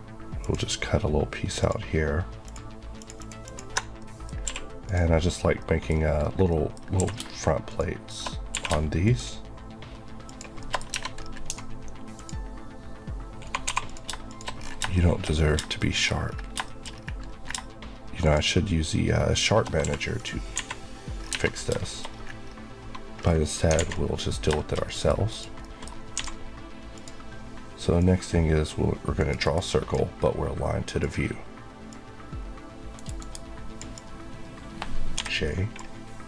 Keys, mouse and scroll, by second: 0.3 ctrl+click, 1.3 ctrl+click, 1.6 ctrl+click, 2.3 click, 3.1 click, 3.7 Left, 3.9 middle click, 4.3 q, 4.7 click, 5.5 middle click, 5.8 scroll, 5.9 scroll up 1, 6.4 middle click, 6.6 scroll up 1, 6.9 q, 7.5 shift+click, 8.4 q, 8.9 shift+click, 10.2 shift+click, 10.4 shift+Left, 10.5 shift+middle click, 10.7 scroll up 1, 11.4-11.8 alt+scroll up 2, 12.0 click, 13.5 2, 13.7 click, 13.9 shift+click, 14.4 click, 14.5-14.8 scroll down 2, 14.8 shift+middle click, 15.6 scroll down 1, 15.9 middle click, 15.9 scroll up 1, 16.0 scroll, 16.1 scroll down 1, 16.5 shift+middle click, 16.7 scroll up 1, 18.1 click, 19.2 shift+Left, 20.1 click, 20.4 a, 21.0 scroll down 1, 21.7 shift+middle click, 22.0 shift+scroll up 2, 23.1 scroll down 1, 23.6 alt+a, 23.8 middle click, 25.2 click, 25.5 middle click, 26.1 d, 26.8 click, 27.8 click, 29.1 right click, 29.3 Right, 30.8 click, 32.8 right click, 33.1 Right, 33.9 click, 35.0 j.